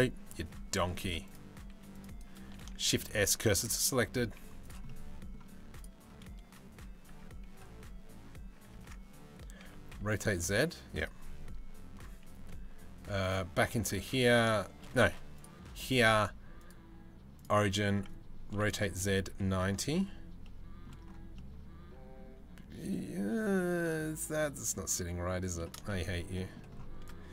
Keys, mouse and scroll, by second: 0.0 c, 2.2 c, 2.4 shift+s, 3.7 Tab, 4.0 z, 4.5 middle click, 6.7 Tab, 8.4 Tab, 9.2 r, 12.8 middle click, 16.2-17.1 middle drag, 18.1 r, 20.0-20.5 middle drag, 21.0 middle drag, 21.1-21.9 scroll down 1, 21.9-25.1 scroll down 1, 25.5 shift+middle drag, 25.9 middle drag.